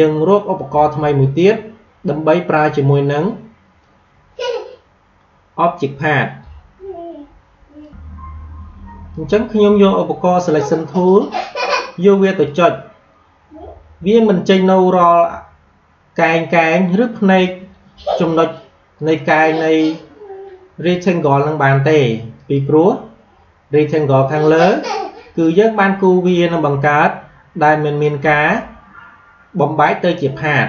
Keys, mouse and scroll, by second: 3.7-7.7 drag, 17.4-30.6 drag.